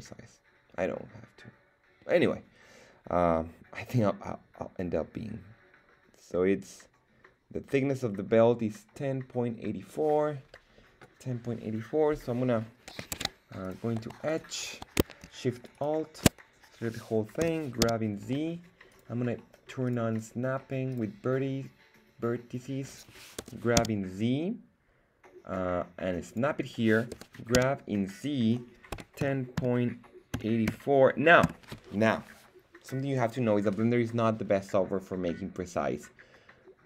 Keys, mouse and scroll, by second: 13.1 ctrl+Tab, 14.2 right click, 15.5 alt+shift+right click, 15.7 right click, 17.5 g, 17.8 z, 18.9 click, 19.8 click, 20.1 click, 23.3 g, 23.7 z, 26.2 click, 27.1 g, 27.5 z, 28.9-30.6 typing, 31.4 Return.